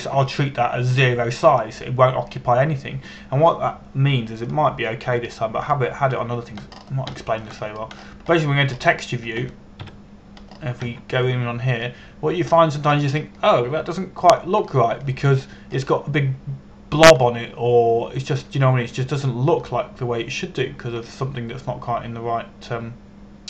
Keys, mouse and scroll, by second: 6.1 click, 8.4 scroll up 1, 8.8 shift+middle click, 9.3 scroll up 1, 10.1 middle click, 11.5 KP_Decimal, 12.1-12.5 scroll up 1, 12.5 Tab, 12.9 scroll up 1, 13.5 middle click, 17.2 scroll down 1, 18.9 middle click.